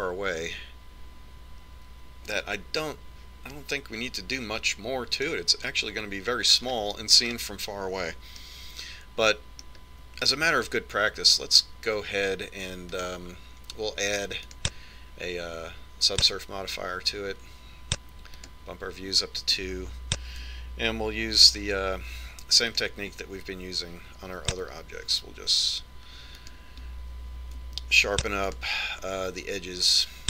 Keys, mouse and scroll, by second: 8.2-8.7 scroll down 1, 8.7 scroll down 1, 8.9-10.2 scroll up 1, 10.2-11.7 middle drag, 11.8 middle click, 14.6-17.9 drag, 20.0 click, 23.1 ctrl+r, 29.8 ctrl+r.